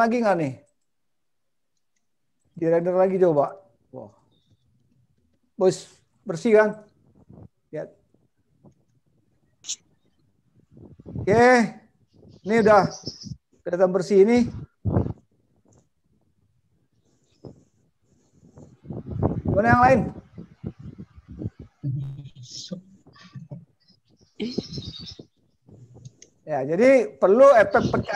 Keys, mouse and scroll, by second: 0.8 click.